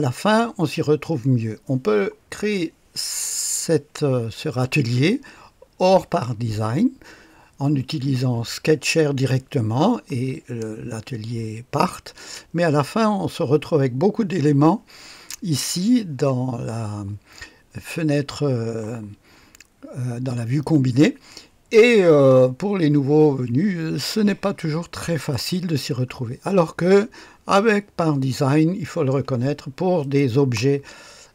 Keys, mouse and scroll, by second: 24.0-24.9 scroll down 1, 24.9 click, 25.8-30.0 scroll up 1, 30.0-31.3 drag.